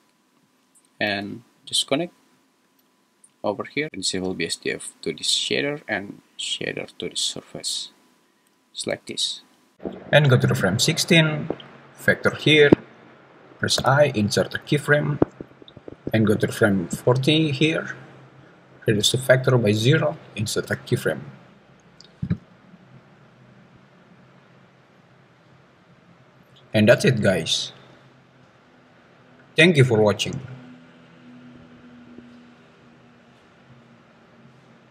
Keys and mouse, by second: 1.1 g, 2.4 click, 2.7 g, 4.3 click, 4.6-5.5 drag, 6.8 click, 7.1-7.9 drag, 8.9 space, 10.6 click, 13.8 i, 17.0 click, 18.9 click, 20.6 i, 22.2 space.